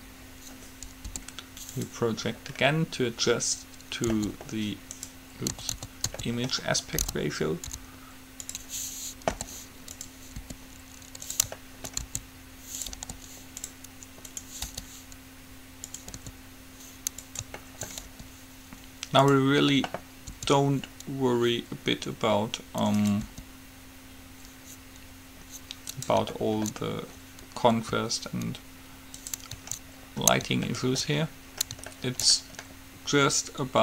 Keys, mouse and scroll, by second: 0.0-1.2 drag, 1.2 u, 2.7-4.7 middle drag, 4.3 s, 5.9 a, 6.2 s, 9.6 g, 10.5 r, 12.2 s, 13.1 g, 14.4-16.4 drag, 14.9 g, 16.4 s, 18.0 middle click, 18.4 r, 20.4 s, 23.4 r, 26.7 middle click, 27.9 s, 29.7-31.1 drag, 30.9 right click.